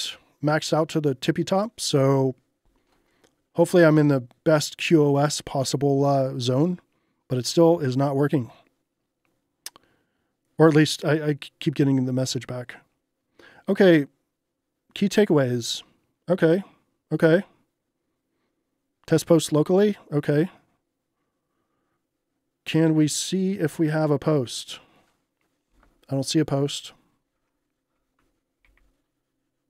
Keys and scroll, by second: 28.7 super+r.